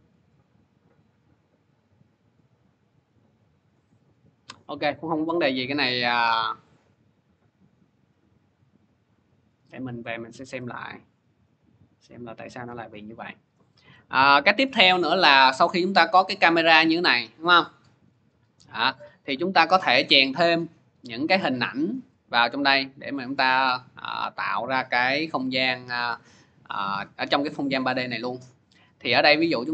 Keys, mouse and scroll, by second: 3.5 click, 8.6 click, 13.3-19.1 drag, 22.6 click, 24.2 click, 25.9 click, 28.6 click.